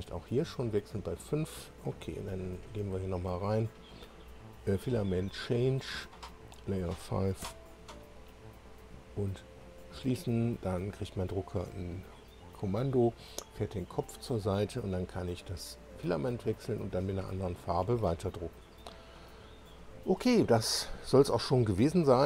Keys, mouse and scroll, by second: 3.1 click, 6.0 click, 6.5 click, 7.4 5, 9.6 click, 19.1 click.